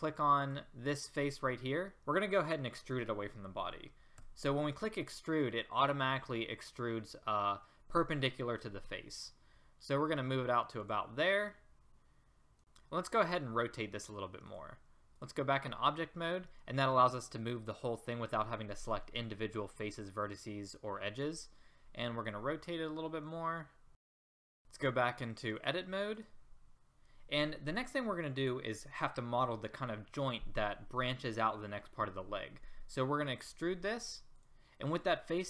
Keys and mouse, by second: 4.2 e, 22.2 r, 24.5 click, 33.2 e.